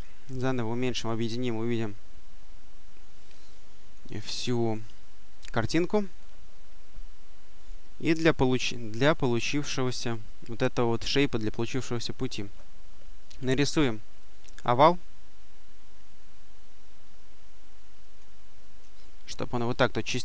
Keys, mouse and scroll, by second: 0.8 click, 3.2-4.3 drag, 5.2 click, 7.9-9.0 drag, 12.0 click, 14.0-18.5 drag, 19.6 click.